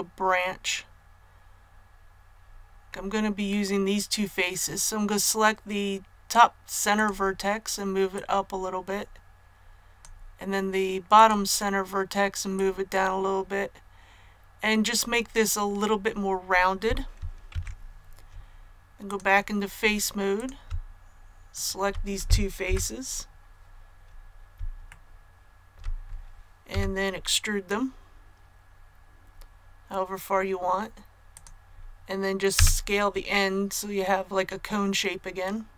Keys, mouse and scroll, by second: 6.9 right click, 8.0-10.8 drag, 11.1 right click, 12.5-15.8 drag, 17.4 Tab, 19.0 click, 20.3 right click, 21.4 shift+right click, 22.6 KP_1, 24.8 shift+middle click, 26.6 shift+e, 31.2 click, 32.5 s.